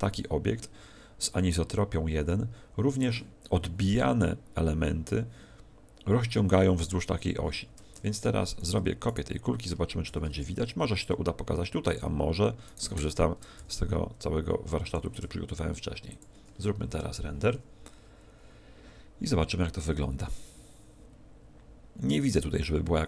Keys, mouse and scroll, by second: 8.5 right click, 10.1 shift+d, 11.9 click, 12.7 right click, 13.5 shift+f, 15.1 click, 15.1 g, 16.1 click.